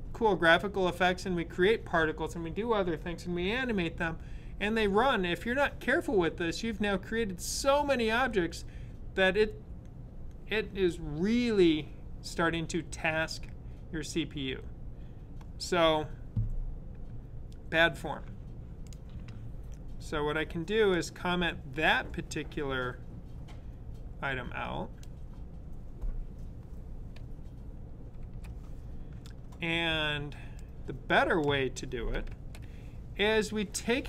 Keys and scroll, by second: 28.1 super+/, 30.7 super+/, 32.1 super+/.